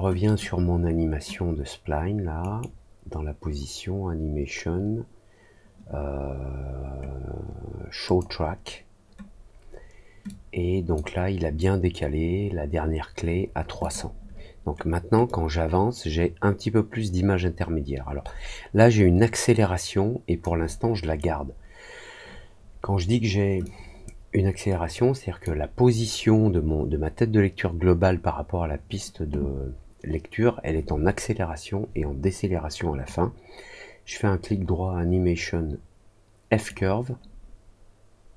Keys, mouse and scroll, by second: 0.2 click, 2.3 right click, 8.0 click, 10.2 click, 13.7 click, 15.2-20.3 drag, 23.6-25.4 drag, 33.0-36.6 right drag.